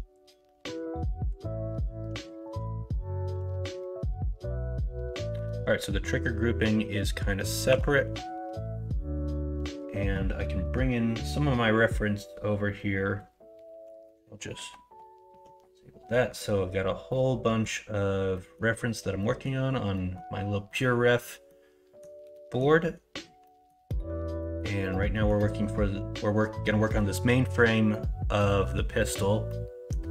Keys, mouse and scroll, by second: 0.5 KP_1, 0.9 KP_3, 2.9 shift+middle click, 7.6 3.